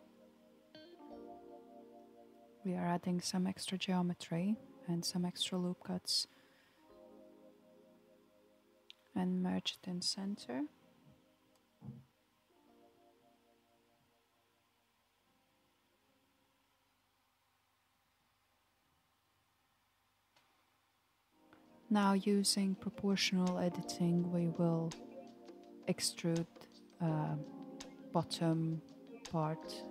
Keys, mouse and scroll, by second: 5.4 ctrl+r, 9.6 space, 11.2 space, 13.8-16.7 drag, 18.4 m, 20.8 m, 22.9 a, 23.2 m, 26.7 click, 28.1 KP_1, 29.5 alt+z.